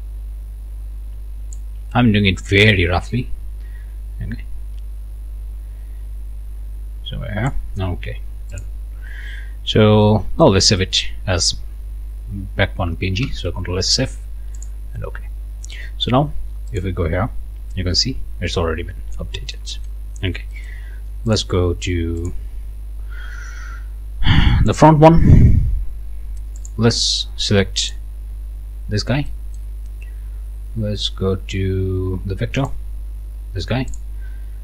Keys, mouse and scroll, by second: 2.7-7.7 drag, 8.5 click, 9.3 scroll down 1, 9.7 scroll up 1, 10.0 click, 13.2 ctrl+s, 14.6 click, 16.7 click, 17.8 scroll down 1, 18.2-18.7 scroll up 2, 19.5 click, 20.2 scroll down 2, 20.6 middle click, 21.3 click, 22.2 click, 24.7 click, 26.6 click, 27.8 click, 28.8 scroll down 1, 29.3 click, 32.6 click, 33.9 click.